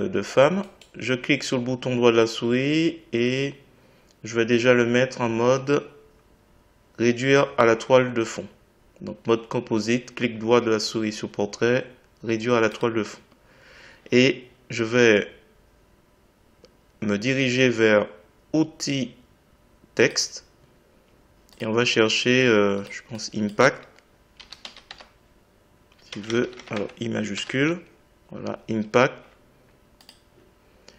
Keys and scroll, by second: 26.1 BackSpace, 26.7 Caps_Lock, 27.3 i.